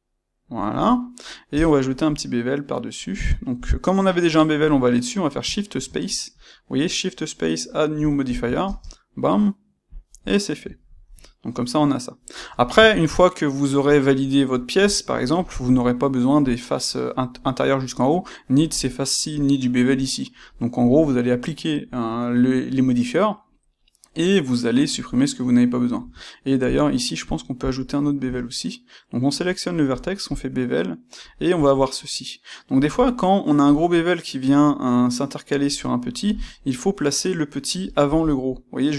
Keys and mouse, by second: 11.0-14.6 middle drag, 13.9 click, 14.8-26.6 ctrl+middle drag, 25.9 Tab, 26.6 click, 26.8-38.9 middle drag, 28.1 space.